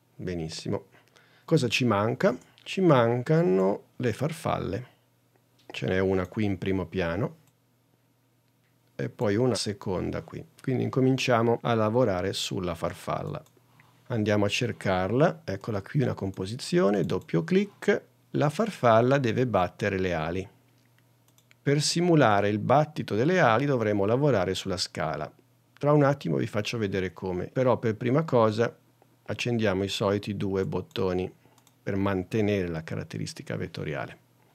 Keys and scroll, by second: 1.6 super+Tab.